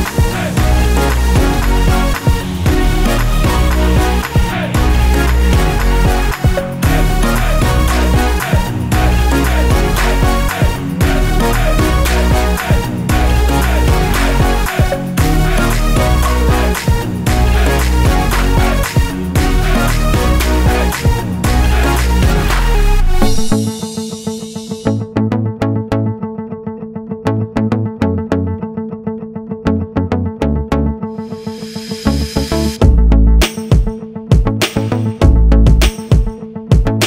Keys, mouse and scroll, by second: 1.1-4.3 scroll down 1, 4.3-5.2 scroll up 1, 6.5 scroll down 1, 10.2-12.6 scroll down 1, 13.7 click, 14.1-14.8 scroll down 1, 14.9-15.3 scroll down 1, 15.5-15.9 scroll down 1, 16.1 click, 17.0-17.5 scroll up 1, 18.3 click, 18.4 double click, 20.4-22.7 typing, 23.5 click, 24.6 ctrl+z, 25.4 ctrl+z, 25.9 scroll down 1, 27.5 click, 28.7 click, 31.5 click, 31.6 double click, 33.6 click.